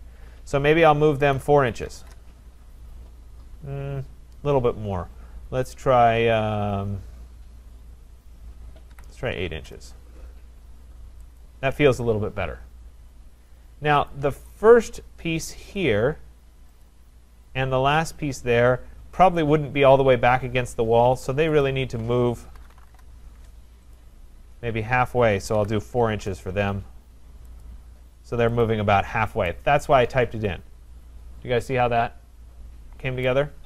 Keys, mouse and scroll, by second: 1.3 4, 1.9 shift+', 2.0 Return, 8.9 8, 9.5 shift+', 9.6 Return, 11.4 click, 14.1 click, 15.8 click, 16.9 click, 18.1 click, 21.7 shift+click, 22.3-23.4 typing, 24.0 click, 25.6-26.5 typing, 27.6 click, 28.0 Return, 28.7 click, 33.3 right click.